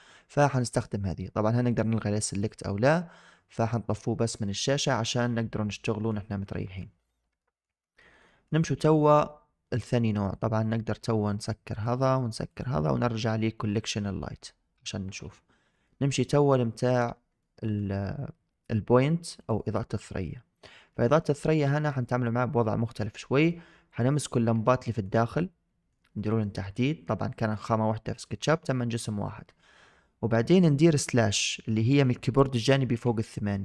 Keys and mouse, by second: 0.6 click, 1.6 click, 2.1 click, 4.2-6.0 middle drag, 7.3 shift+middle drag, 7.7 middle click, 8.2 shift+middle click, 11.6 click, 12.3 click, 15.8 middle click, 17.3-17.7 shift+drag, 19.3 click, 20.0-20.5 middle drag, 20.8 middle drag, 20.9 shift+drag, 21.9-22.4 shift+drag, 23.1 middle drag, 24.5-24.9 shift+drag, 25.0-25.8 middle drag, 26.3-26.6 shift+middle drag, 27.3-28.1 shift+drag.